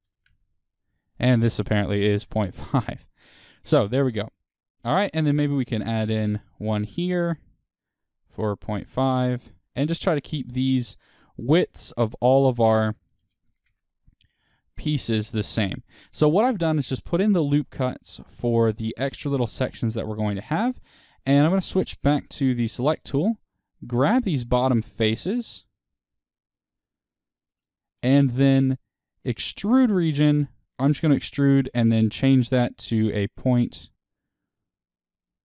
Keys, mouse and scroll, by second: 0.0 click, 0.3 KP_Enter, 2.2 click, 2.3 KP_Enter, 4.9 click, 9.0 KP_Enter, 10.4-13.7 drag, 13.7 KP_Enter, 15.7-23.6 middle drag, 17.0-17.4 scroll down 2, 20.0-20.3 scroll down 2, 22.2-23.6 drag, 22.2 w, 24.2 3, 25.0 click, 25.8 shift+click, 29.6-35.3 drag, 35.3 e.